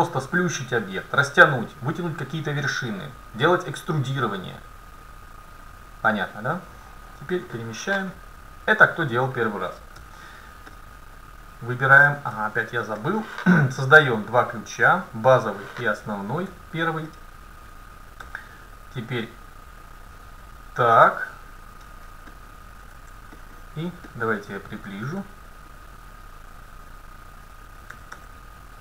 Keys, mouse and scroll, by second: 6.6-8.5 drag, 8.8-10.6 right drag, 10.0 Tab, 12.4 Tab, 14.4-16.8 drag, 16.5 Tab, 18.3 a, 19.5-21.4 drag, 22.4 middle click, 24.1-26.6 middle drag, 26.6-28.8 right drag, 27.9 a, 28.3 a.